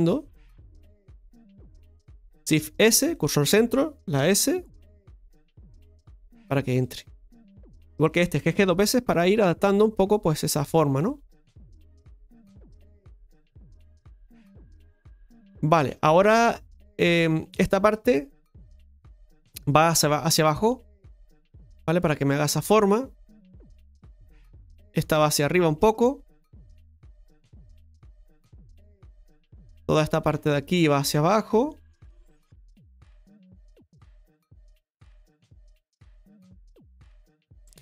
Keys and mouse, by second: 7.7 right click, 11.1 right click, 12.1 g, 15.4 middle click, 17.5 right click, 18.2 shift+right click, 18.5 middle click, 20.0-21.3 drag, 21.5-23.9 middle drag, 24.7 right click, 25.2 shift+right click, 26.1 click, 27.3-28.3 middle drag, 28.5-29.9 shift+middle drag, 29.9 right click, 30.5 shift+right click, 31.5-37.8 drag.